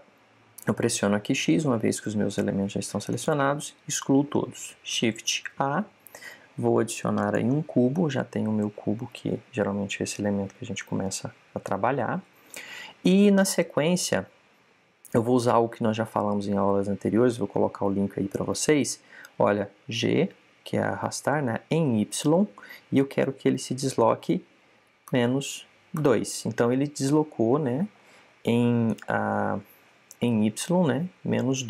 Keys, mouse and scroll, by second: 1.6 x, 6.1 shift+a, 9.6-14.5 middle drag, 20.8 g, 29.8 click, 31.0-31.6 middle drag.